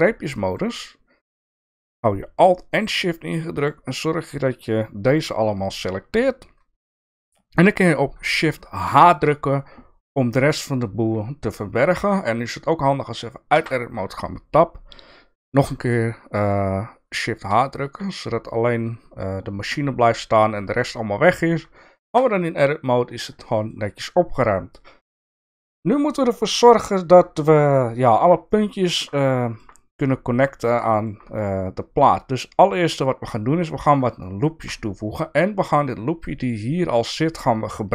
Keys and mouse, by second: 0.3 shift+middle click, 8.8 shift+h, 13.5 Tab, 17.5 shift+h, 22.0 Tab, 23.5 shift+middle click, 26.4 KP_1, 28.5 middle click, 29.4 middle click, 30.8 shift+middle click, 32.7 click, 34.2 shift+middle click.